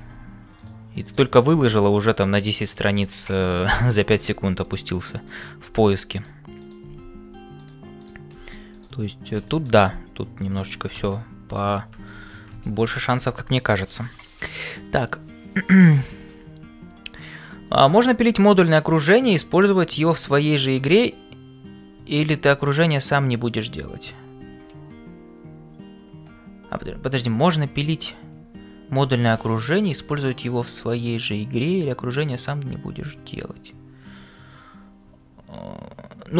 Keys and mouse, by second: 0.0-36.3 typing, 2.3 click, 3.7 click, 6.6 click, 8.0 click, 12.0 shift+middle click, 12.9 ctrl+s.